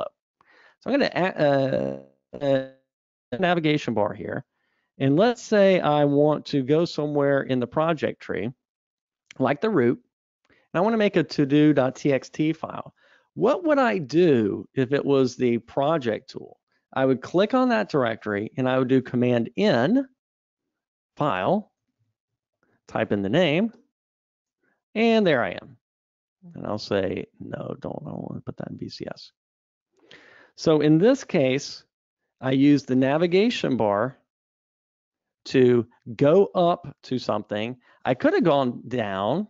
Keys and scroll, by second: 31.7 super+e, 36.2 super+Up.